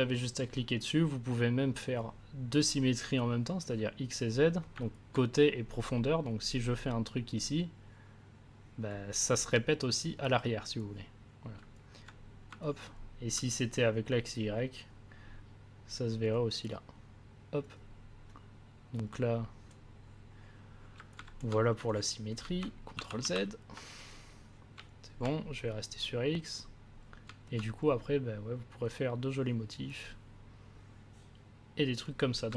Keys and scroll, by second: 12.4 a, 22.9 ctrl+z.